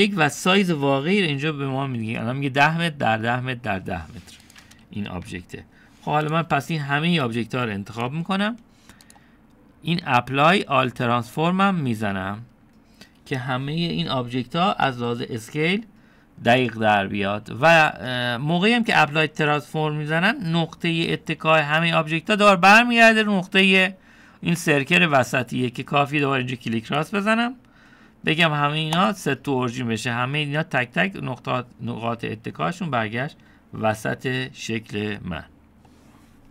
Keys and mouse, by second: 5.5 click, 6.3 Delete, 7.3 click, 8.5-9.1 drag, 10.1-12.4 drag, 16.8-17.5 middle drag, 21.2-21.8 middle drag, 28.0-30.0 drag.